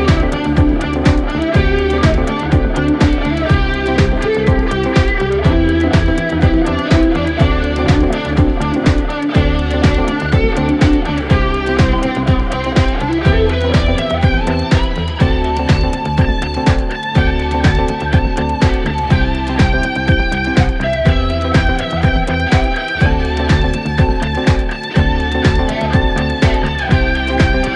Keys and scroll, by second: 1.2 2, 6.1 4, 7.9 Return.